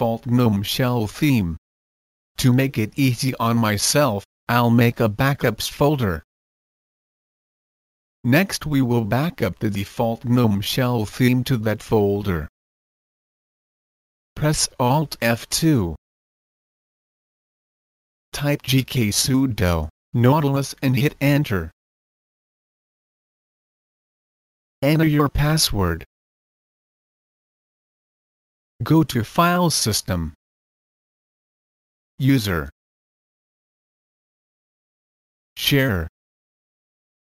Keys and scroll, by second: 0.0-2.8 typing, 4.6 typing, 14.0 alt+F2, 18.3-22.1 typing, 22.2 Return.